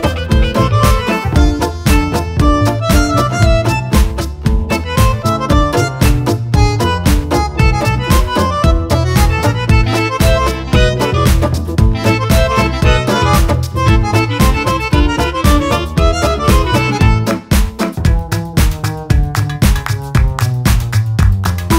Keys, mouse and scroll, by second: 0.8 click, 1.6 click, 2.8 click, 4.6 click, 7.4 Delete, 9.5 click, 10.1 click, 14.0 click, 14.6 shift+click, 15.1 shift+click, 17.5 click, 19.7 ctrl+shift+click, 20.1 ctrl+shift+click, 21.1 shift+click.